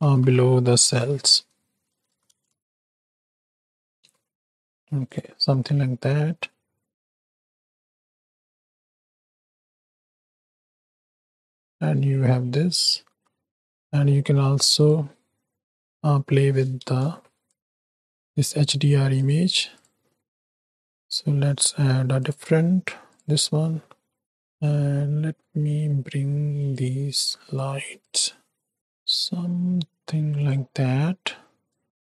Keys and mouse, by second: 0.8 r, 3.4 g, 6.2-6.5 drag, 6.3 middle click, 6.3 right click, 7.0 drag, 7.3 shift+drag, 7.5 shift+middle click, 7.5 shift+right click, 7.9 click, 7.9 middle click, 7.9 right click, 8.3 shift+middle click, 8.6 middle click, 10.1 ctrl+alt+KP_0, 10.8 z, 11.8 shift+middle click, 12.3 z, 15.6 z, 16.7 KP_0, 17.5 z, 19.2-19.7 drag, 20.4 click, 20.8 click, 23.5 middle click, 24.0 middle click, 24.4-26.7 drag, 28.1-30.5 drag, 31.6 click.